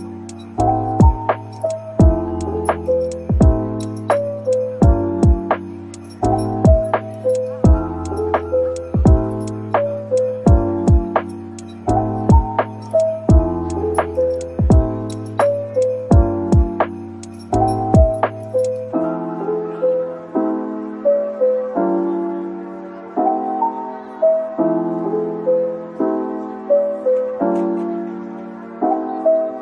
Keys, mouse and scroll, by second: 15.3 scroll down 1, 21.4 scroll down 1.